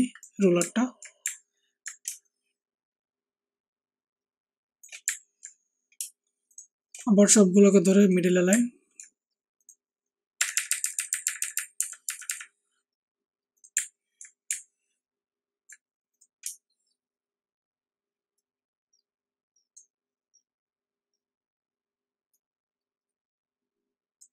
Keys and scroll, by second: 10.3 Up, 10.5 Up, 10.6 Up, 10.8 Up, 10.9 Up, 11.1 Up, 11.2 Up, 11.5 Up, 11.7-12.2 Up.